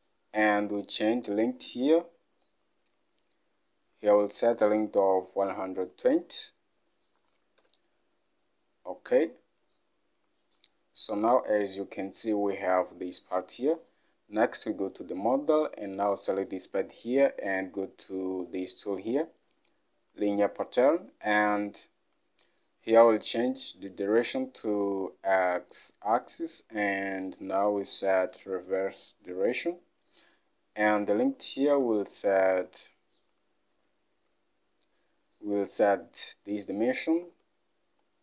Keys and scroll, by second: 1.2 alt+Tab, 7.3-7.7 typing, 31.9 alt+Tab, 34.4 Down, 34.5 Down, 34.7 Down, 37.3 alt+Tab.